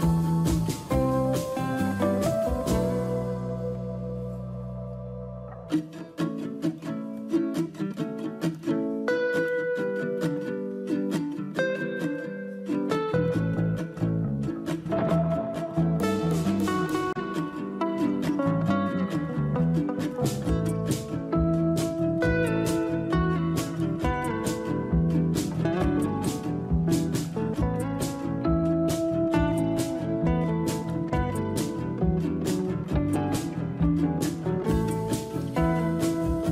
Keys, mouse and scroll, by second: 11.3-15.2 scroll down 7, 16.3-20.5 scroll down 7.